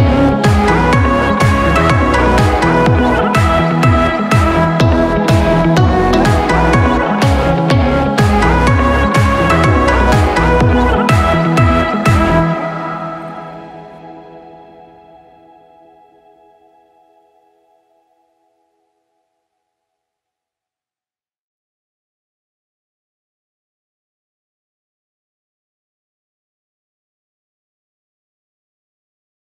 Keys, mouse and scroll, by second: 1.8 Tab, 2.3-3.2 scroll up 2, 3.2-3.6 scroll down 5, 3.6 scroll up 1, 3.8-5.2 middle drag, 5.2-6.1 scroll down 5, 5.4-5.8 middle drag, 6.1-7.7 middle drag, 7.7-8.1 scroll up 5, 8.1-9.4 shift+middle drag, 9.4-9.8 scroll up 3, 9.8 shift+middle click, 10.7 click, 11.1-12.6 right drag, 12.6-13.1 scroll down 10, 13.1-14.5 middle drag, 14.5-14.9 scroll up 4, 14.9-15.4 shift+middle drag, 15.4 click, 15.7-17.1 middle drag, 17.1 scroll down 4, 17.4-18.0 middle drag, 18.0-18.4 scroll up 1, 18.4-19.4 shift+middle drag, 19.4-19.7 scroll up 5, 19.7-20.9 shift+middle drag, 20.9-21.3 scroll down 4, 21.3-22.2 middle drag, 22.2 KP_3, 22.9 scroll down 2, 23.2-23.7 middle drag, 23.7-24.0 scroll up 4, 24.0 shift+middle click, 24.8 click, 25.6 click, 26.4 shift+a, 27.8-28.8 scroll down 4, 28.8-29.4 drag.